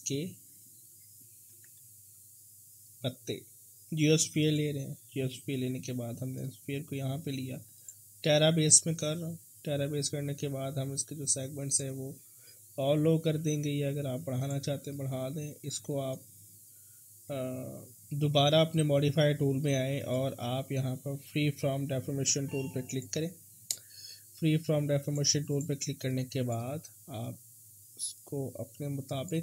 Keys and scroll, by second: 1.5 w, 21.7 f.